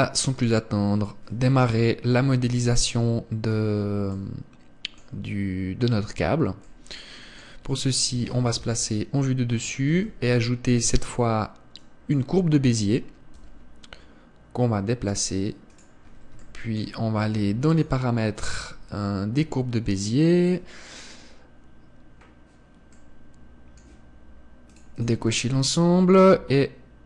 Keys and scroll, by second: 0.0 Escape, 3.0 KP_1, 9.2 KP_7, 10.5 shift+a.